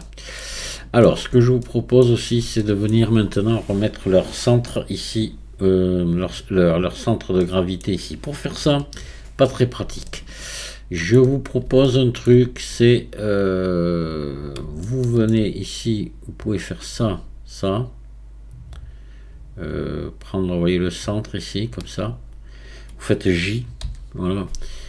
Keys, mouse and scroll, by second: 0.0-1.3 middle drag, 1.3 Tab, 1.6-8.6 middle drag, 8.6 KP_1, 9.6 scroll up 2, 10.1-12.7 shift+middle drag, 12.7 Tab, 14.0-14.8 scroll up 2, 14.8-16.5 shift+middle drag, 16.5 click, 21.3 shift+click, 23.8 j.